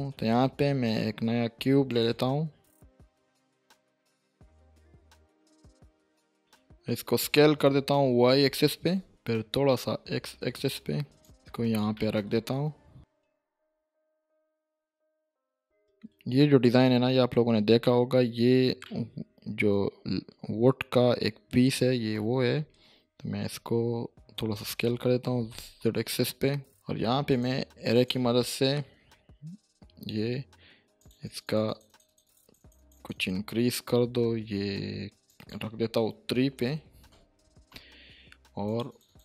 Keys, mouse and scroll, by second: 0.2 shift+a, 1.9-3.1 drag, 4.1 7, 4.3-5.0 scroll up 2, 4.4 shift+middle click, 5.0 scroll down 1, 5.1-5.4 shift+middle click, 5.3 click, 5.8 s, 8.4-10.1 typing, 11.2 click, 11.4 scroll down 1, 11.5 shift+middle click, 11.8-12.2 click, 12.3 scroll up 1, 12.7 shift+middle click, 13.0-13.9 typing, 14.5 click, 14.9 scroll down 1, 15.0 middle click, 15.3 shift+middle click, 15.4 shift+scroll up 1, 15.5-15.9 middle drag, 17.8-18.4 shift+middle drag, 21.3-22.1 scroll up 1, 22.1 s, 22.6 z, 23.5 y, 25.2 s, 25.5 z, 26.7 click, 27.3 click, 28.1 click, 35.8 click, 36.6 3, 37.1 Return, 38.7 click.